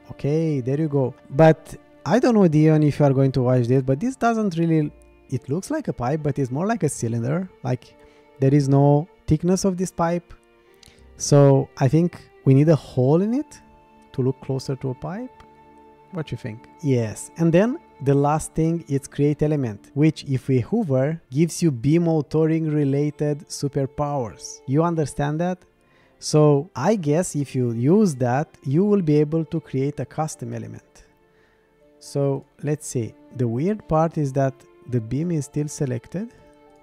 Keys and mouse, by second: 2.8-3.7 middle drag, 4.6-5.5 middle drag, 17.6 click, 19.3 middle click, 26.7 middle click, 28.6 shift+click, 29.6 middle click, 35.2 click, 36.3 click.